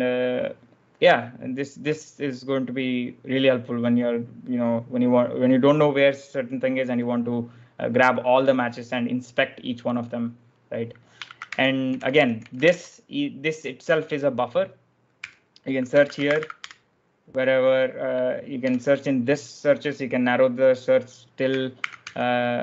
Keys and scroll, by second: 11.1-16.5 typing, 18.3-19.0 typing, 21.6 ctrl+w.